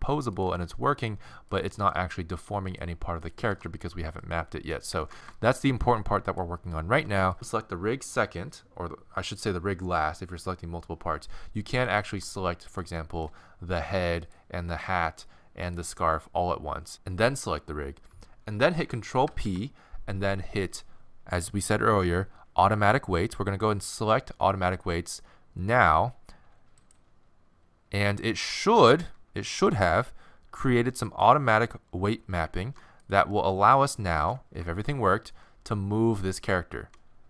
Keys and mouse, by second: 0.4-1.6 right drag, 0.5 r, 1.8 r, 3.4 r, 5.0 ctrl+Tab, 6.3 right click, 11.9-13.0 right drag, 13.2-14.3 middle drag, 14.3-16.9 right drag, 19.3 ctrl+p, 31.1 right click, 32.6 ctrl+Tab, 36.9 r.